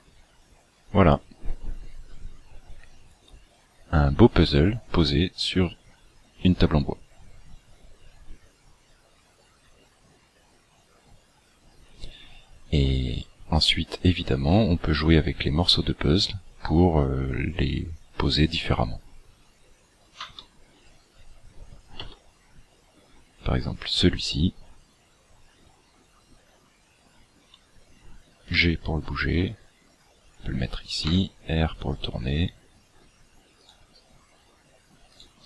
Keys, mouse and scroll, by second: 20.1 Escape, 21.0 scroll up 3, 22.0 Tab, 28.5 g, 31.0 r, 33.6 right click, 35.1 right click.